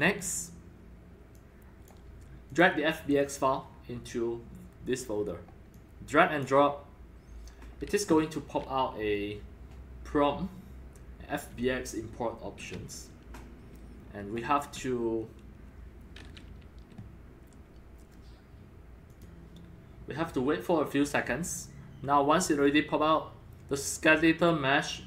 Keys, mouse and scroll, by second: 1.3 click, 2.5 click, 3.8-4.5 drag, 5.7 click, 6.5-11.6 drag, 19.1-24.3 drag.